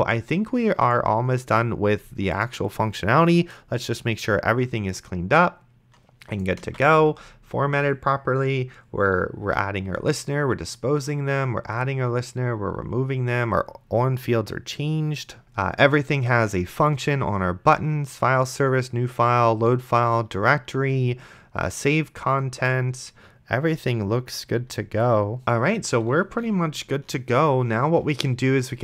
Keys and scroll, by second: 6.9 ctrl+s.